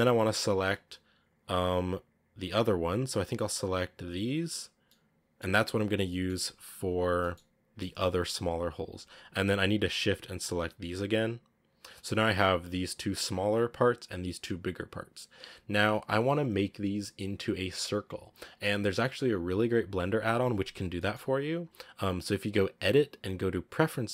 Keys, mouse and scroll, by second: 0.1 right click, 0.7 shift+right click, 1.2 shift+right click, 2.8 shift+right click, 3.8 shift+right click, 4.2 shift+right click, 4.7-5.8 middle drag, 5.8 scroll down 1, 5.9 middle click, 6.5-7.1 scroll up 1, 7.1-8.7 middle drag, 8.7-10.0 scroll down 1, 10.0 shift+right click, 10.5 shift+right click, 11.1 shift+right click, 11.6 shift+right click, 12.0-15.6 scroll up 1, 20.8-24.0 middle drag, 24.0-24.1 drag.